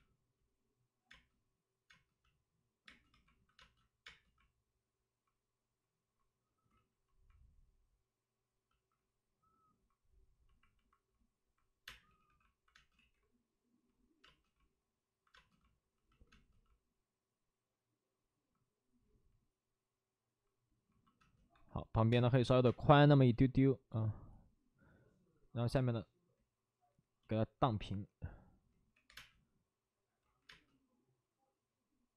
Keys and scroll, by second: 1.0 space, 3.0 space, 3.0 2, 3.5 space, 6.6 ctrl+z, 11.8-12.7 typing, 12.9 ctrl+z, 14.2 space, 18.4 space, 21.1 space, 21.4 1, 22.6 space, 23.1 space, 25.7 5, 28.7-29.5 typing, 30.2 ctrl+z, 31.5 space.